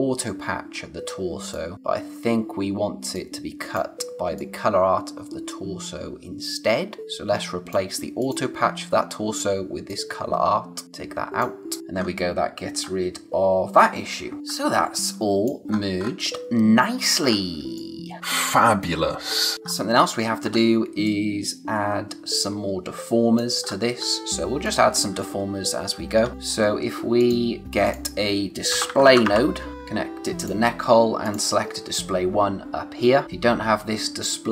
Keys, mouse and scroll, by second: 1.5 click, 1.7 space, 3.1 click, 7.0 space, 8.2 click, 11.8 scroll down 1, 12.7-14.7 scroll down 1, 14.7 space, 15.0 click, 15.2 space, 15.7-17.2 scroll up 1, 17.2 scroll down 1, 17.6 space, 17.7 click, 18.1 space, 19.5 scroll down 1, 19.6-20.1 scroll up 1, 20.4-20.8 scroll down 1, 20.8 space, 21.0 click, 21.4 space, 23.6-24.6 scroll up 1, 24.6 click, 26.3 space, 27.2 click, 28.6-29.7 typing, 30.4 click, 33.2 click.